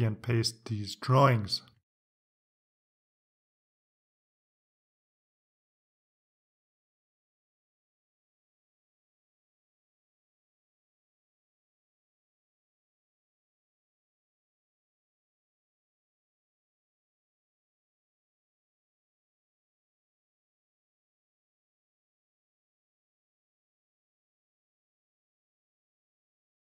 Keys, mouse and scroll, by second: 2.2 click, 3.3 click, 5.1 right click, 7.3 click, 10.1 click, 12.3 right click, 13.9 click, 15.3 click, 16.2 click, 16.4 right click, 18.1 click, 18.7 click, 19.7 ctrl+v, 22.1 click, 23.5 ctrl+x, 24.2 ctrl+click, 25.8 ctrl+v.